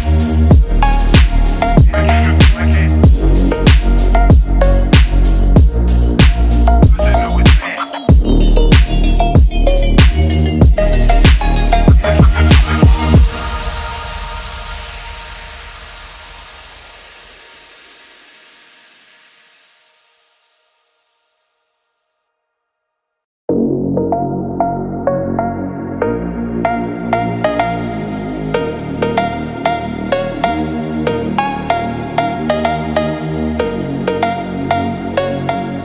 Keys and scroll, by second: 10.6 ctrl+z, 10.8 ctrl+z, 14.2 ctrl+-, 15.0 ctrl+=, 32.9 ctrl+-.